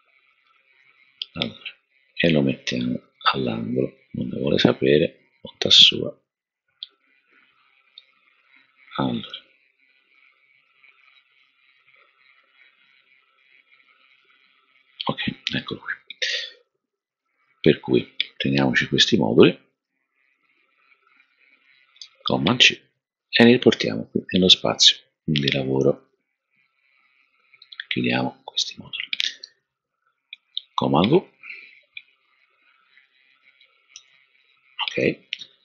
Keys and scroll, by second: 22.0 super+c, 30.3 super+v, 33.4 super+v, 33.9 super+v, 34.8 super+v.